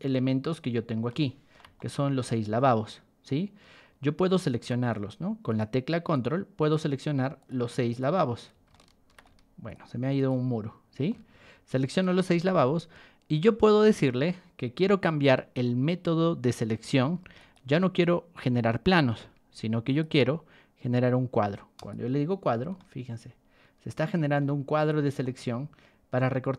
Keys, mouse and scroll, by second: 0.3 middle drag, 1.0-1.5 shift+middle drag, 1.7-3.2 middle drag, 3.8 scroll down 1, 4.1 shift+middle click, 5.4 ctrl+click, 6.1 ctrl+click, 6.6 ctrl+click, 7.3 ctrl+click, 7.8 ctrl+click, 8.7-9.1 shift+middle drag, 9.6 ctrl+click, 10.1 ctrl+click, 10.6 scroll down 2, 11.0-12.2 shift+middle drag, 17.0 ctrl+1, 17.3 click, 18.0 ctrl+click, 19.1 Escape, 19.8 click, 21.7 click, 22.7-24.3 shift+middle drag, 24.7 click, 25.2-26.5 shift+middle drag.